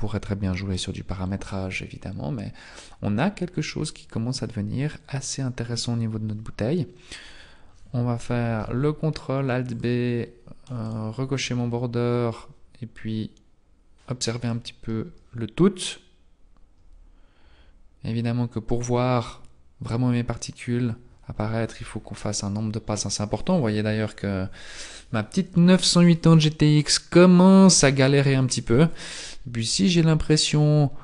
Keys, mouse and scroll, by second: 2.0-4.4 scroll up 6, 7.2-8.4 scroll down 5, 8.4 ctrl+alt+b, 9.6 click, 11.0 click, 16.7-19.8 scroll up 2, 28.9 scroll up 1, 29.5-30.0 scroll up 3.